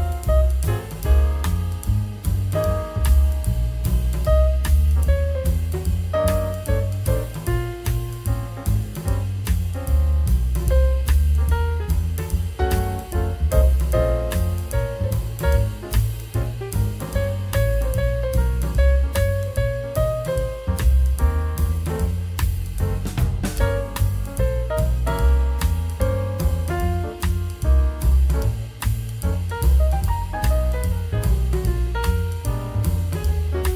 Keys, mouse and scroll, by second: 0.7 scroll up 2, 1.8 scroll down 1, 2.6-3.0 scroll up 2, 3.5 middle click.